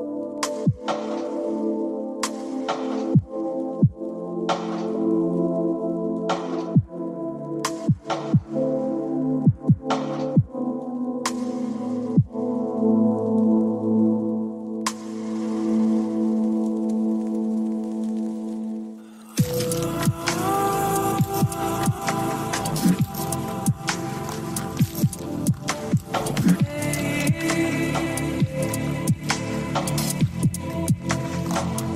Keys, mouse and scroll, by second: 1.2 click, 4.0 g, 5.1 click, 5.4 click, 9.5 click, 13.6 click, 14.6 click, 16.2-17.0 drag, 19.4 click, 23.3 click, 26.0 shift+click, 29.2 KP_1.